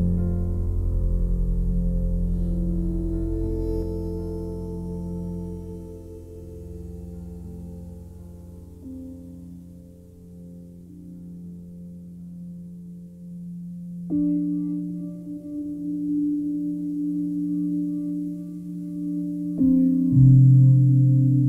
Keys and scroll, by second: 2.4 c, 5.6 Return, 14.2 ctrl+z, 15.5 s.